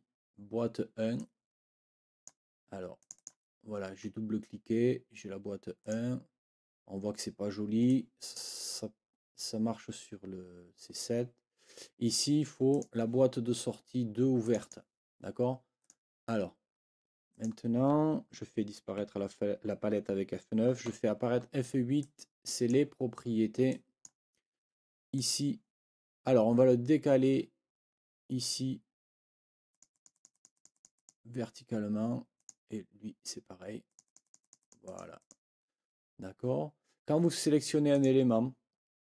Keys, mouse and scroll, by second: 1.2-2.4 drag, 3.0 click, 5.8 click, 7.8 click, 12.7 click, 14.4 click, 15.8 click, 17.3 click, 19.0 F9, 20.8 F8, 22.0 click, 23.7 click, 25.2 click, 29.7-31.2 drag, 32.4 click, 33.8-35.2 drag, 37.9 click.